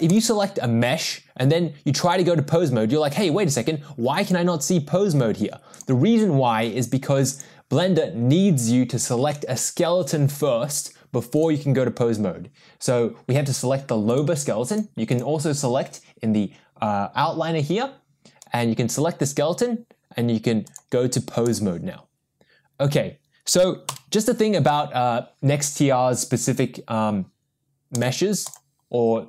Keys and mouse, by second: 0.1 click, 2.0-3.0 drag, 4.2-5.4 drag, 5.8 click, 12.4 click, 14.1 click, 15.1 click, 20.7-21.7 drag, 23.9 n, 28.0-28.7 drag.